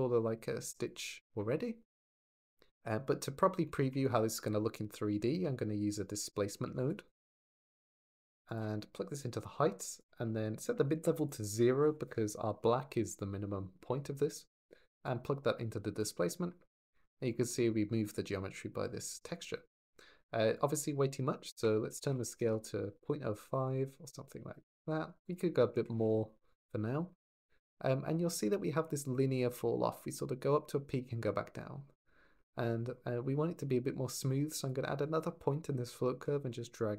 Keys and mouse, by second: 3.4 shift+middle drag, 5.7 click, 6.5 shift+a, 9.0 click, 11.0 click, 14.8 click, 17.1 click, 18.7 click, 20.5-22.2 drag, 23.0-25.1 middle drag, 25.1 click, 27.5 middle click, 27.9 drag, 28.1 middle drag, 34.6-36.6 drag.